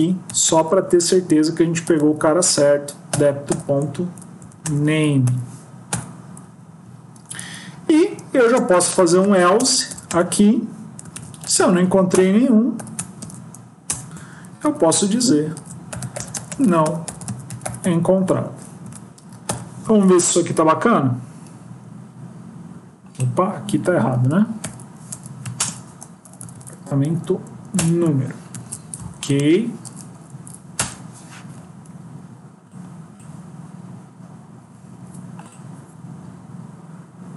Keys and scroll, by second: 4.3 Up, 4.5 Return, 19.7 ctrl+s, 24.2 Delete, 25.0 BackSpace, 25.6 ctrl+space, 26.1 Down, 26.3 Down, 26.4 Down, 26.9 Down, 28.4 ctrl+s.